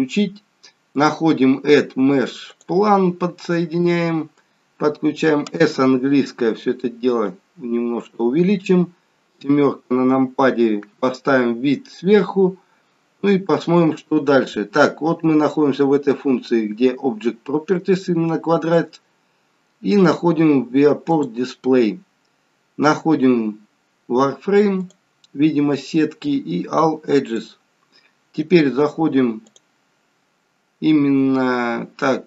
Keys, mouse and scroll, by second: 1.0 click, 3.4-4.0 scroll up 2, 3.8 middle click, 5.7 s, 7.7-8.4 scroll down 3, 8.4-9.4 scroll down 1, 9.4 KP_7, 13.4-16.2 scroll up 1, 19.0 scroll down 1, 21.0 click, 21.0-21.8 scroll down 7, 21.8-22.6 scroll down 2, 24.6 click, 27.3 click, 29.3 click.